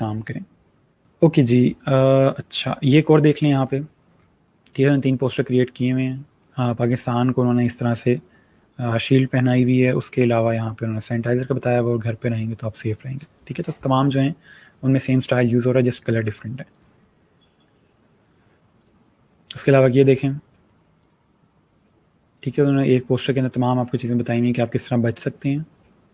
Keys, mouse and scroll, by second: 1.0 click, 1.6-2.1 scroll down 1, 2.6 scroll up 1, 3.6-4.2 scroll down 1, 4.9 scroll up 1, 5.3 click, 16.7 click, 18.7 click, 20.0 scroll down 1, 20.9 click.